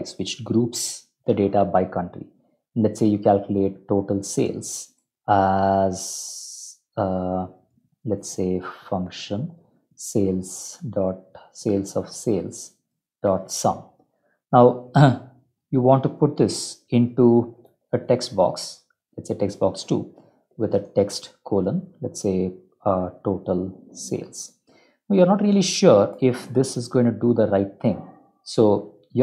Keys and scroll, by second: 0.4 shift+End, 0.6 shift+Left, 2.0 End, 2.3 Return, 2.8-13.6 typing, 14.0 Escape, 14.5 Down, 14.7 Down, 14.9 Down, 16.3 ctrl+shift+End, 17.6 BackSpace, 18.1 Up, 18.6 Down, 19.1 Tab, 19.4 Tab, 20.7 shift+;, 20.8 shift+space, 22.8-24.9 typing, 25.5 ctrl+End, 25.5 Return, 26.0 shift+Home, 26.3 BackSpace, 26.6 Up, 26.8 Up, 27.7 End, 29.1 Up.